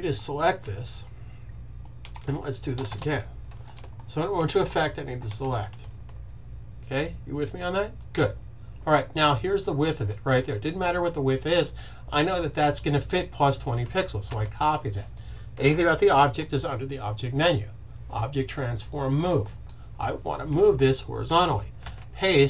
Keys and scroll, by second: 0.1 shift+super+z, 14.2 super+c, 21.7 super+v.